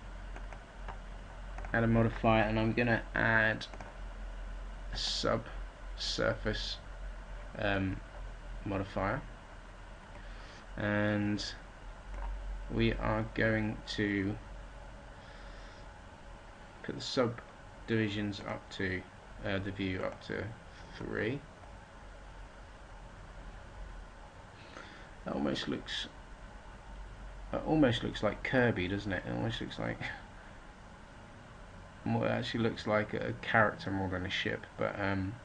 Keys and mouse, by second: 18.3-22.8 middle drag.